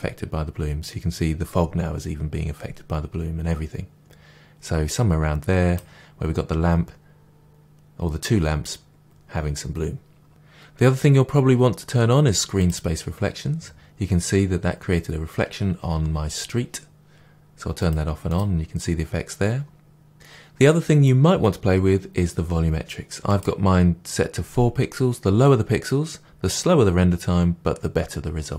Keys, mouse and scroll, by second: 10.2-10.6 scroll down 2, 10.6-12.6 drag, 17.8 click, 20.1-20.6 scroll down 1, 23.3-28.5 drag.